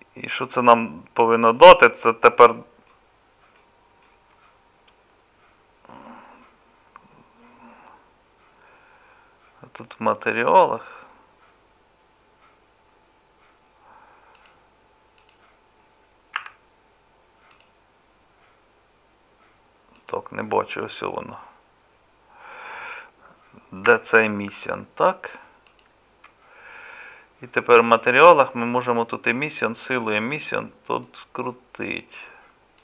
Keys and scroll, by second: 16.4 z, 23.9 z.